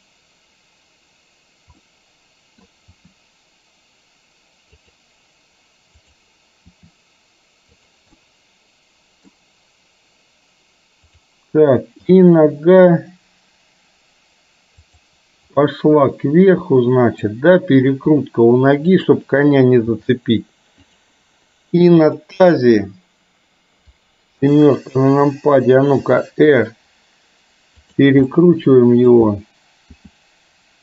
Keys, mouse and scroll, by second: 1.9-2.7 middle drag, 2.9 r, 6.1 click, 6.8 r, 8.2-9.3 middle drag, 12.2 g, 15.7-17.3 middle drag, 18.2 r, 19.9 g, 22.1 click, 24.4 KP_7, 26.2 r, 28.4 middle click, 30.1 r.